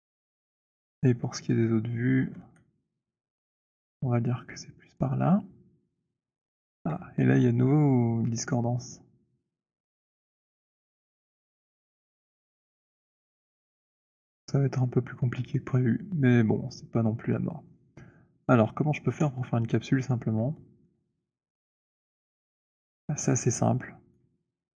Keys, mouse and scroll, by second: 1.2-2.3 scroll, 2.4 w, 4.9 click, 6.7 z, 11.0 click, 12.9 z, 18.1-18.4 scroll, 18.8-19.1 scroll, 21.5 alt+middle click, 22.3 alt+middle click, 22.5 alt+middle click, 24.3 right click.